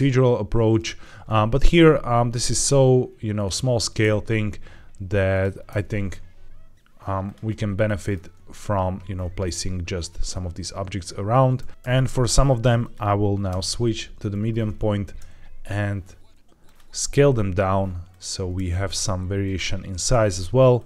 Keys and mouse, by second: 1.5 alt+d, 3.2 click, 3.9 alt+d, 5.2 click, 5.6 alt+d, 7.1 drag, 7.7-8.0 shift+middle drag, 11.5 alt+d, 11.7 Escape, 11.7 ctrl+z, 11.7 s, 11.7 alt+d, 12.7-13.4 drag, 13.4 ., 15.2 s, 16.5 click, 16.9 alt+d, 18.4 alt+d, 20.0 alt+d.